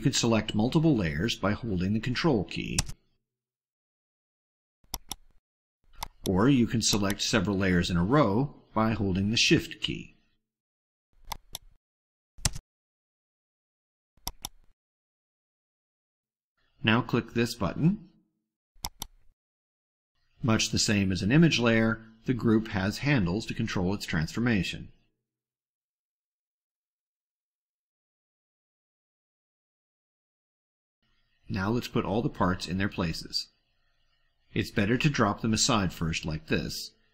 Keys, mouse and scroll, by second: 4.7 ctrl+click, 5.9 ctrl+click, 6.7 ctrl+click, 11.3 click, 14.2 shift+click, 18.6 click, 21.3 click, 22.0 click, 25.6 click, 26.2 click, 27.5-28.5 drag, 29.3 click, 30.3-31.0 drag, 34.1 click, 34.8-35.6 drag, 35.9 click, 36.6-37.1 drag.